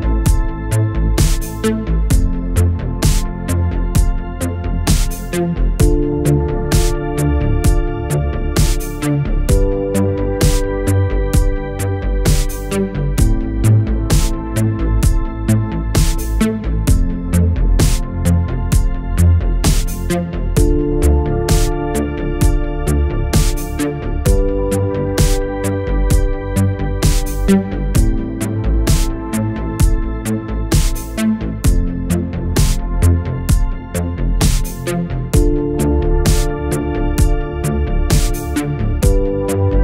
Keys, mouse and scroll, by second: 0.5-1.8 click, 4.4 p, 6.7 click, 10.7 click, 16.7-18.6 click, 21.5 right click, 23.1 click, 24.8-26.5 typing, 28.2 click, 29.6 click, 32.0 click, 34.0 ctrl+Num_Lock, 34.1 ctrl+n, 35.5-37.6 typing.